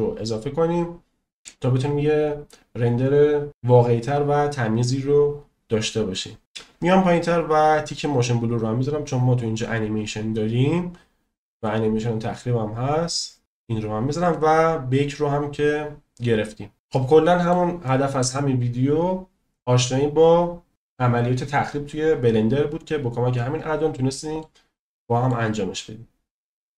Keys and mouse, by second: 8.1 click, 14.3 click, 17.0-17.5 middle drag, 17.8 middle click, 23.9 middle click, 24.9 middle click.